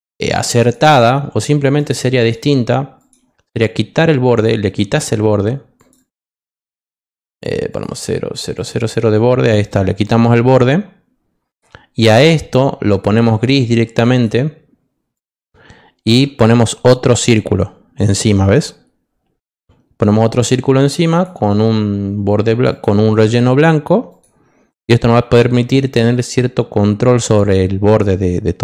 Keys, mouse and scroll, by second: 0.6 click, 1.7 click, 2.1 click, 2.9 click, 4.3 click, 5.7 click, 5.9 click, 6.8 click, 7.7 click, 8.5 click, 8.7 click, 9.5 click, 12.8 click, 14.1 click, 15.1 click, 17.3-19.4 shift+drag, 21.1 click, 22.7 click, 24.0 click, 26.0 click, 27.5 click.